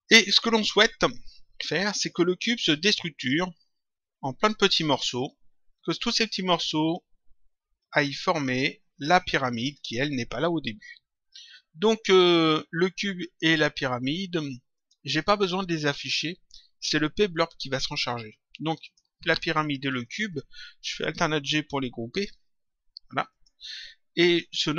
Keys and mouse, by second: 14.7 click, 18.8 click, 19.9 ctrl+click, 23.2 click.